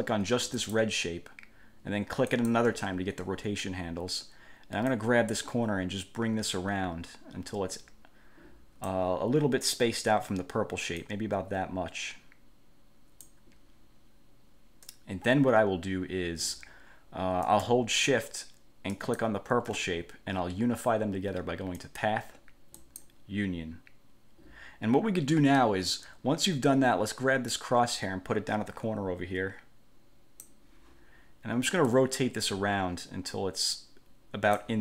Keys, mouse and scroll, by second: 0.8 click, 2.5 click, 5.0-9.2 drag, 11.2-13.6 drag, 19.1 shift+click, 22.0 click, 22.9 click, 27.7-30.8 drag, 32.1-34.8 drag.